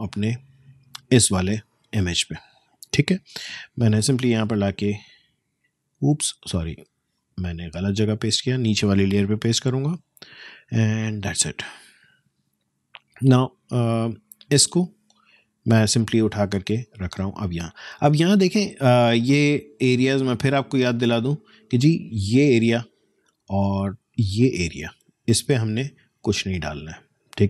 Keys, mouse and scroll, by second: 3.0 ctrl+alt+v, 6.9 Escape, 7.8 alt+click, 9.4 ctrl+alt+v, 11.2-27.4 alt+drag.